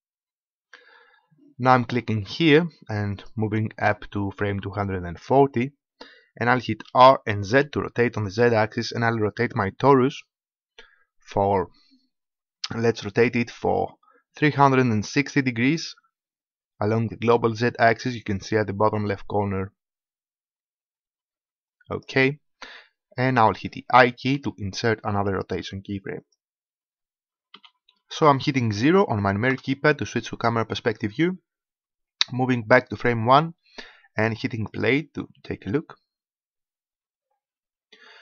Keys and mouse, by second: 3.2-5.1 drag, 7.0 r, 23.7 click, 24.4 i, 29.4 KP_0, 32.8-36.6 drag, 37.4 middle click.